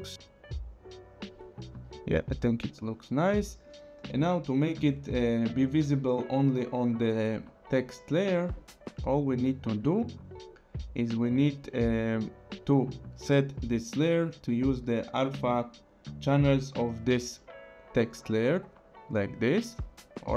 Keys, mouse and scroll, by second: 1.7 space, 2.7 click, 3.8 click, 9.3 click, 14.0 click.